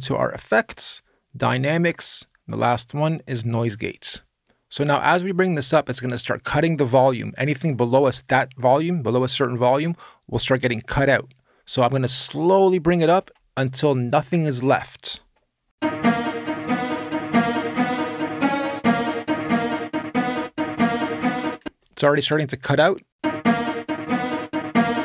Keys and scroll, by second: 15.4 space, 21.4 space, 22.9 space.